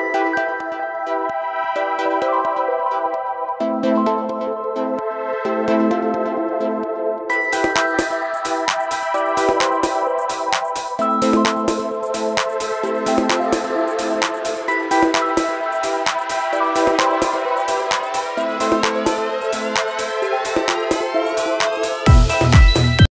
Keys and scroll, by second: 3.6 ctrl+z, 6.5 ctrl+z, 12.2 ctrl+z, 12.3 ctrl+z, 15.5 ctrl+z, 18.5 ctrl+z, 20.2 ctrl+z, 20.9 ctrl+z, 21.1 ctrl+=, 21.2 ctrl+=, 22.9 ctrl+z.